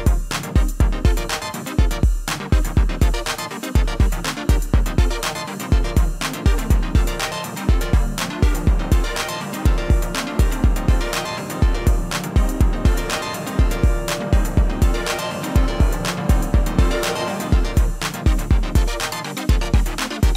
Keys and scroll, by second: 0.0-0.2 typing.